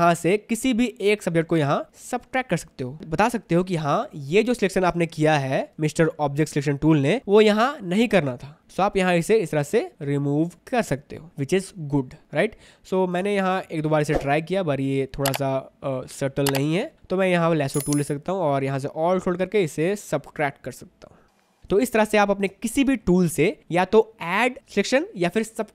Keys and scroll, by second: 13.4 space, 21.6 v, 21.7 space.